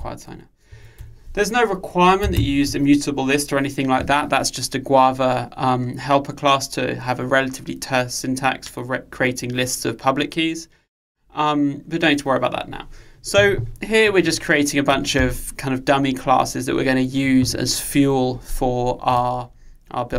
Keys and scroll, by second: 0.5 Return, 2.4 alt+Return.